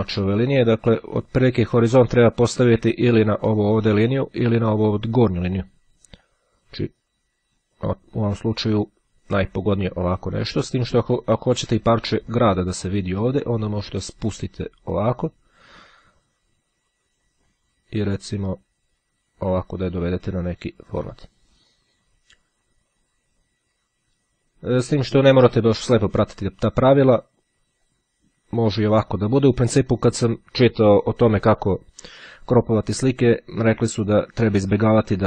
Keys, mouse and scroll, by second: 1.4-2.8 drag, 6.4-11.5 drag, 12.6-18.1 drag, 18.8-22.2 drag, 28.0-29.7 drag, 34.1-35.2 drag.